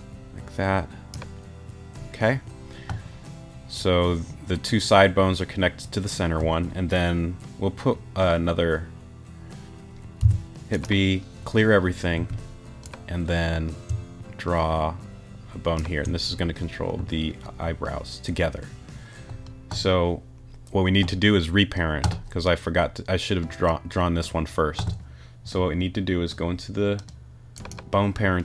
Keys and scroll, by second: 10.2 b, 12.2 a.